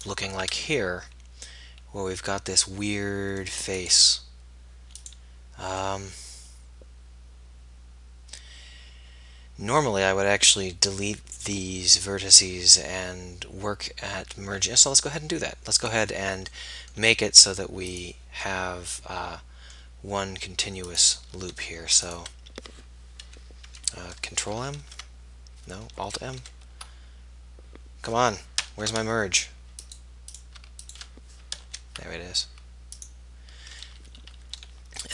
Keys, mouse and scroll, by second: 0.7 click, 0.9-2.7 middle drag, 5.9 middle click, 8.1 middle click, 14.5-15.9 middle drag, 15.9-16.9 right drag, 16.9 x, 23.3 m, 24.8 ctrl+m, 31.5 alt+m.